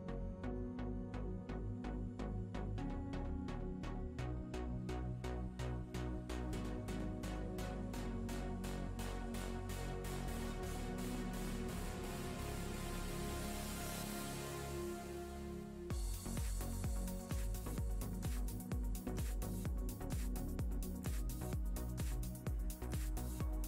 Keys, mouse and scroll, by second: 1.4 shift+middle click, 3.2 shift+a, 10.1 click, 12.2 click, 15.7 click, 17.8 shift+middle click, 20.2 shift+a.